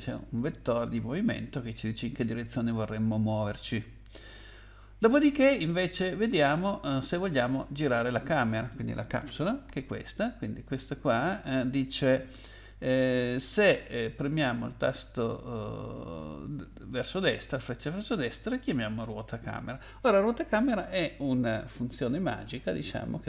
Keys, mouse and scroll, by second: 18.6 click, 18.8 click, 21.7 click, 22.9 click, 23.2 click.